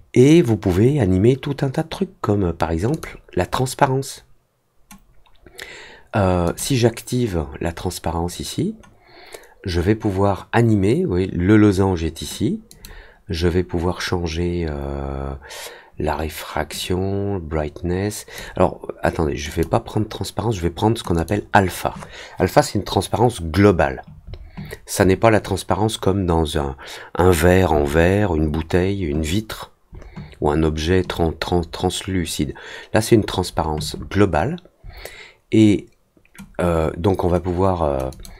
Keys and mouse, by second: 2.9 click, 6.4 click, 12.6 click, 16.7-18.3 drag, 19.4 click, 21.1 click, 38.0 click.